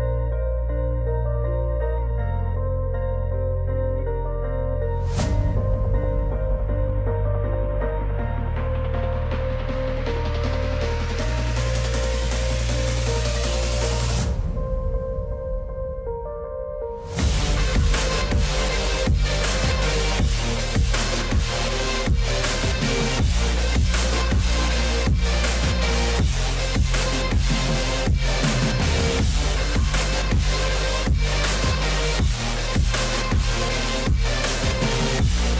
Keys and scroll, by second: 19.4 alt+w, 31.3 F4.